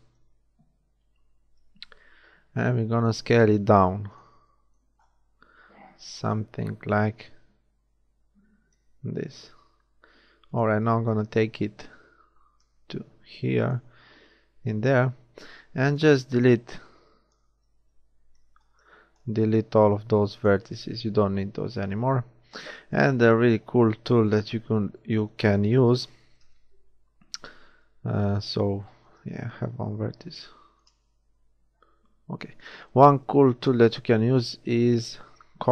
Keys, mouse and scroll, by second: 0.2 KP_1, 1.5 s, 5.4 s, 10.8 z, 11.5-13.5 drag, 15.0 z, 15.7 z, 16.4 a, 16.9 click, 18.5 b, 19.8 x, 21.5 z, 22.3 middle click, 24.2 KP_1, 29.2-30.5 middle drag, 29.8 click, 29.8 right click, 31.7 a.